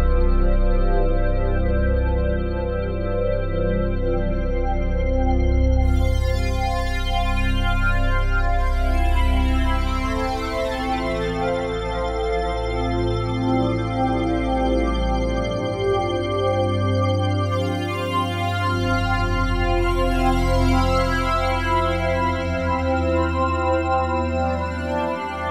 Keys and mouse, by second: 0.0 click, 1.0-2.2 drag, 2.2 space, 2.7 space, 5.1 space, 6.5-15.2 drag, 14.7 space, 16.5 space, 17.8 click, 18.3 space.